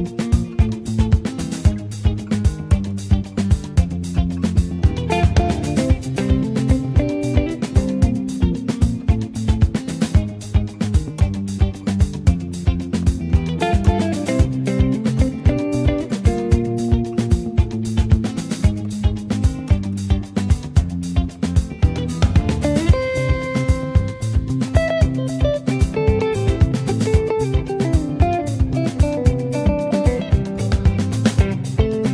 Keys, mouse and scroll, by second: 0.9 click, 2.8 r, 5.0 click, 5.4 alt+middle click, 5.8 click, 6.2 ctrl+a, 6.8 click, 7.1-9.8 shift+middle drag, 9.8 scroll down 2, 10.1-11.1 middle drag, 11.1 s, 11.8 ctrl+s, 12.2 shift+middle click, 12.6 shift+click, 12.8 shift+a, 15.1 ctrl+z, 15.4 shift+a, 18.9 alt+middle click, 19.6 click, 21.6 scroll down 1, 21.8-23.3 middle drag, 23.3 ctrl+s, 23.6 scroll down 1, 23.8 shift+middle click, 24.1 shift+a, 26.0 scroll down 2, 26.3 alt+middle click, 27.1-28.1 scroll up 2, 28.1 click, 28.6-29.0 scroll down 2, 29.0-30.7 alt+middle drag, 30.7 scroll up 1, 31.1 shift+middle click, 31.8 scroll down 2.